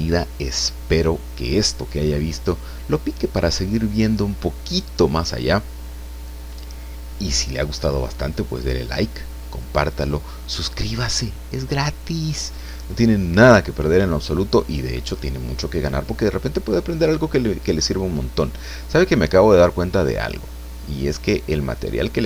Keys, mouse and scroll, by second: 18.9-19.4 scroll down 2.